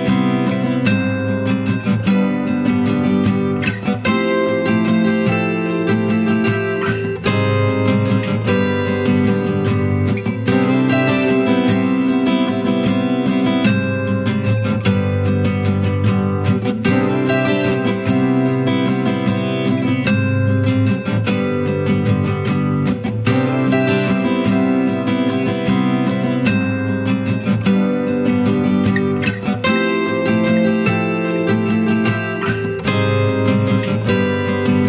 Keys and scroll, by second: 25.6 ctrl+i, 34.5 ctrl+shift+u.